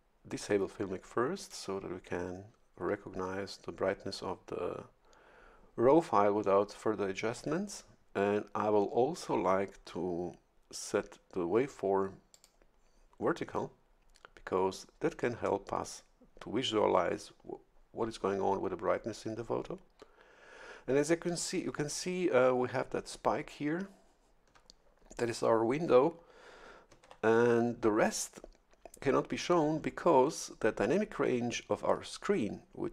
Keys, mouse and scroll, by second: 1.4 click, 12.3 click, 27.0 shift+F11.